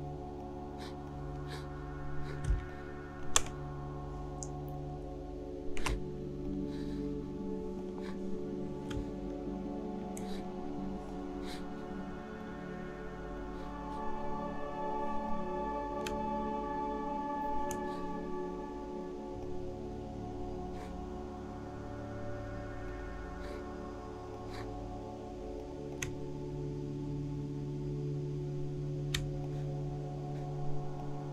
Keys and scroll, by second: 2.5 space.